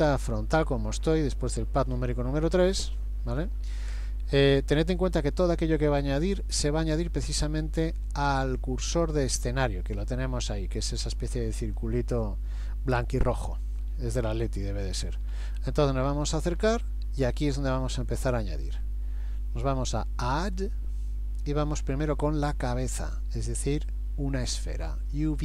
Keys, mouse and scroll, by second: 14.3 shift+middle click, 15.5-16.8 scroll up 2, 17.3-18.2 scroll up 1, 20.6 click.